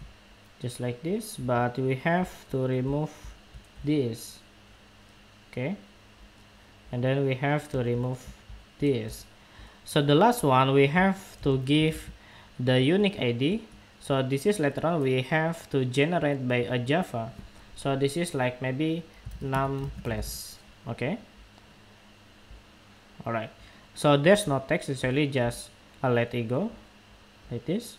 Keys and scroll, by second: 0.0 super+v.